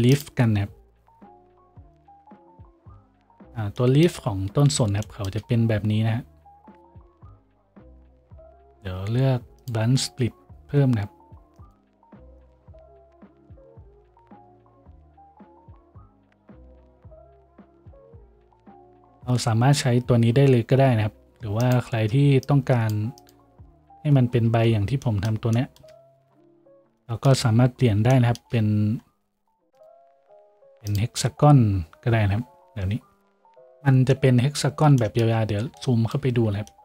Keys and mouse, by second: 3.6-10.1 shift+middle drag, 10.1-36.8 drag, 17.8 shift+z.